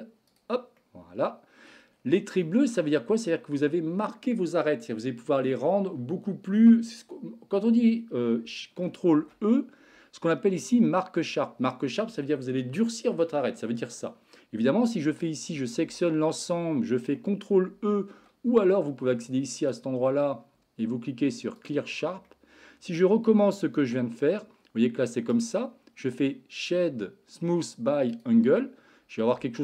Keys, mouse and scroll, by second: 0.8 middle click, 2.4 middle click, 9.2 ctrl+e, 15.5 a, 15.8 a, 17.7 ctrl+e, 19.6-21.7 drag, 22.3 middle click, 23.7 Tab, 25.2-28.3 right drag.